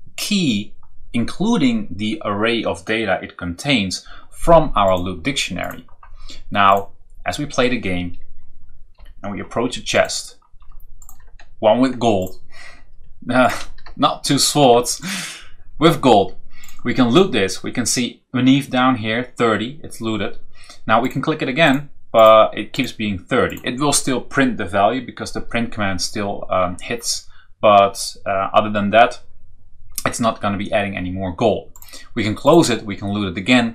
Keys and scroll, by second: 8.9 Down, 11.1 Right, 13.5 Up, 13.8 Right, 14.9 Right.